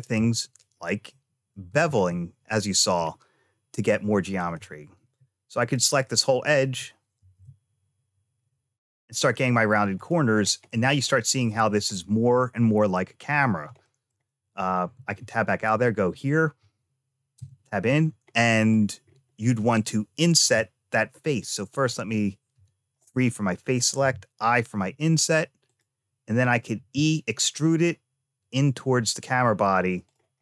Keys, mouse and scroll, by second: 1.5 Tab, 1.9 middle click, 4.1 click, 4.9 2, 5.4 click, 7.0 ctrl+b, 10.2 click, 10.5 middle click, 12.4 middle click, 13.7 shift+middle click, 14.8 Tab, 15.5 click, 17.2 Tab, 18.2 middle click, 18.9-20.2 scroll up 1, 20.2 i, 21.6 click, 22.4 3, 22.8 click, 23.8 i, 26.6 e.